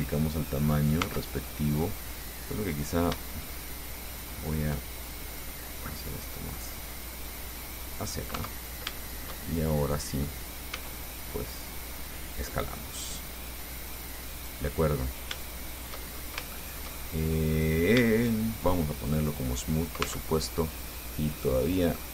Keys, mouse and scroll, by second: 0.6 click, 1.3 Tab, 1.7-2.1 scroll up 1, 2.9 right click, 3.8 shift+right click, 4.3 shift+right click, 5.5-8.5 drag, 8.6 Tab, 8.9 scroll down 3, 9.2-10.7 shift+middle drag, 10.9 s, 12.6 click, 13.7-14.9 drag, 15.1 scroll down 1, 15.8 shift+click, 16.4 shift+scroll up 1, 16.6 shift+middle click, 16.7-17.7 shift+drag, 17.7-18.0 shift+scroll up 1, 19.3 click, 20.3 Tab, 22.0-22.1 drag.